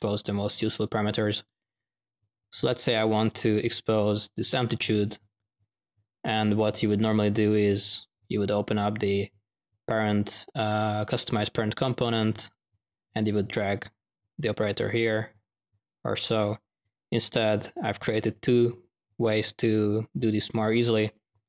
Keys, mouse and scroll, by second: 1.4-2.1 drag, 2.7-6.5 drag, 7.5 click, 7.7 drag, 12.3 click, 12.5-12.9 drag, 14.5-16.3 drag.